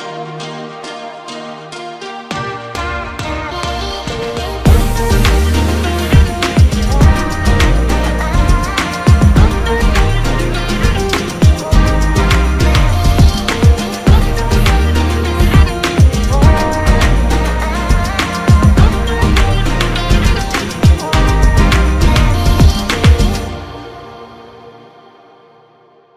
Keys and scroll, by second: 0.6-1.5 typing, 3.6 typing, 9.6 ctrl+s, 21.6-24.3 typing.